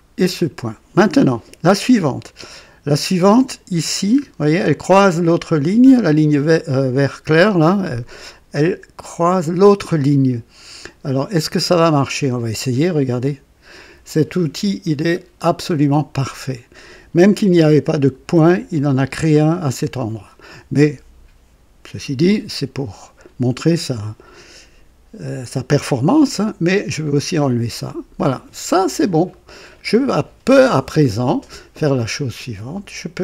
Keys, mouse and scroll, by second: 4.1-4.4 scroll up 2, 13.0 click, 15.1-15.5 scroll down 1, 15.8 right click, 26.9 click, 28.7-29.1 scroll up 2, 29.2 right click.